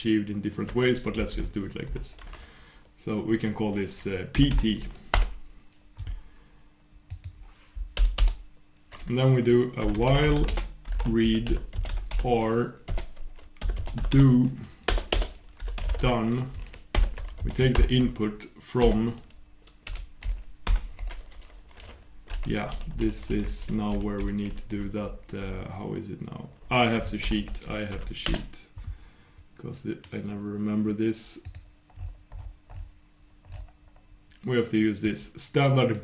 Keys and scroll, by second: 28.4 super+\.